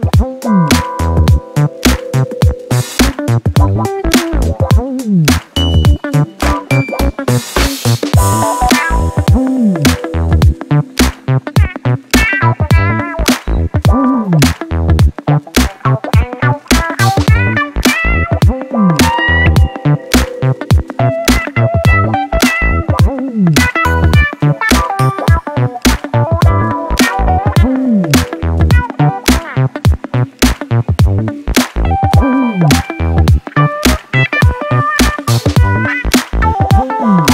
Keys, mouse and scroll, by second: 1.5-1.8 scroll up 1, 3.7 click, 4.2-6.4 drag, 7.0-10.0 drag, 10.5 click, 12.4 s, 14.7 g, 17.8-19.4 drag, 21.2 click, 23.0-24.6 drag, 24.8-25.2 scroll up 1, 25.5-26.7 drag, 28.2 click, 29.2 click, 30.9 s, 33.6 click, 34.2-37.3 drag.